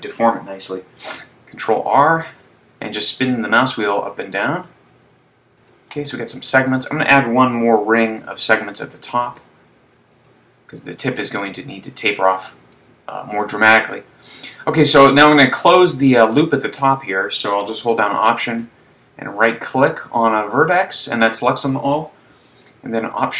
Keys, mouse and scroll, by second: 1.5 ctrl+r, 5.8 click, 7.4 a, 8.3 ctrl+r, 10.3 click, 11.5 middle click, 13.1 shift+middle click, 13.9-14.7 scroll up 3, 18.7 alt+right click.